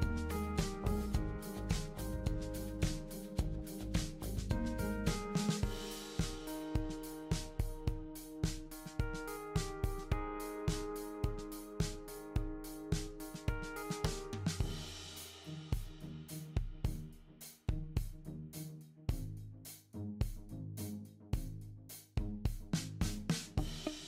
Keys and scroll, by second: 14.1 super+d.